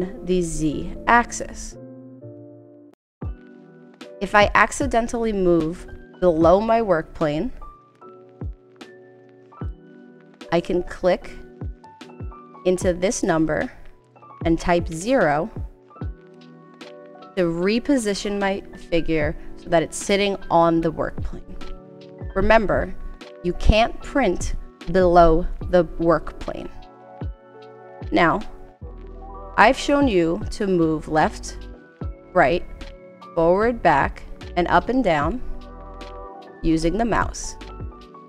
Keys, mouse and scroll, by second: 13.4 click, 14.9 0, 16.3 Return.